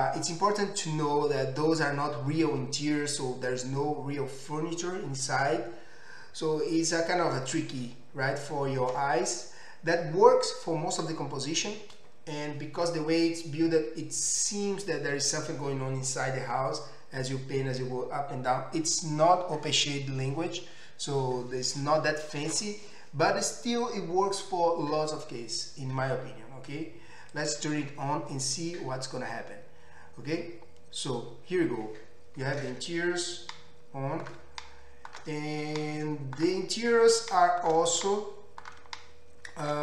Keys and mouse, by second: 27.4-39.8 drag.